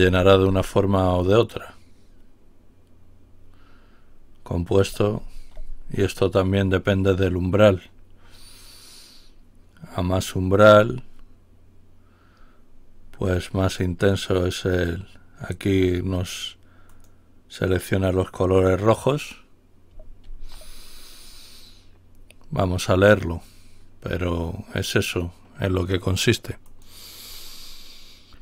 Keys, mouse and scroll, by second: 0.1 ctrl+y, 1.1 click, 5.2 ctrl+y, 13.6 click, 14.7 click, 16.9 click, 20.1 ctrl+y, 26.7 click.